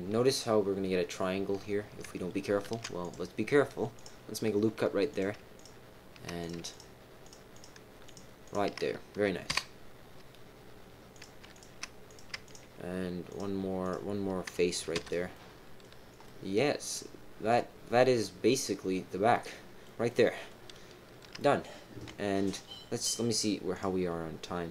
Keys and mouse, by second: 2.6 ctrl+r, 5.1 click, 5.5 shift+click, 6.4 click, 6.7 shift+click, 7.2 shift+click, 7.5 shift+click, 8.4 shift+click, 9.5 f, 11.1 click, 11.5 shift+click, 12.0 click, 12.4 shift+click, 13.2 shift+click, 13.8 shift+click, 14.7-15.4 typing, 15.3 middle click, 16.2-19.8 middle drag, 20.0 middle click, 21.3 middle click.